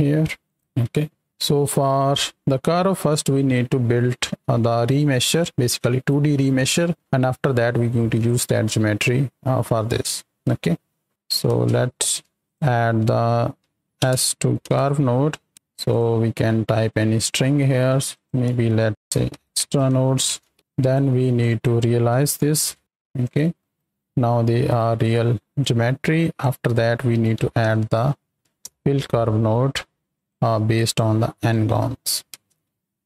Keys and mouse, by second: 0.4 click, 0.9 click, 1.4 click, 9.7 click, 10.5 click, 11.1 z, 11.5 ctrl+space, 11.8 click, 12.4 shift+a, 15.9 click, 16.9 click, 18.1-20.5 drag, 20.6 click, 21.3 click, 23.2 click, 23.9 right click, 24.9 middle drag, 25.5-26.4 drag, 30.1 click, 30.8-32.0 drag, 32.3 ctrl+space, 32.7 click.